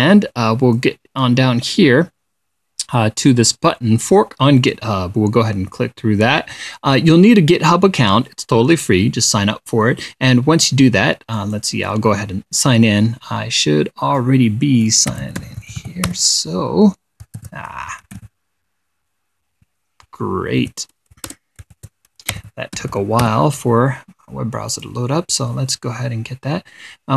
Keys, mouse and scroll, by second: 5.1 click, 11.8 click, 15.4-19.1 typing, 21.1 ctrl+a, 21.8-23.9 typing, 22.2 shift+Tab, 25.2 click.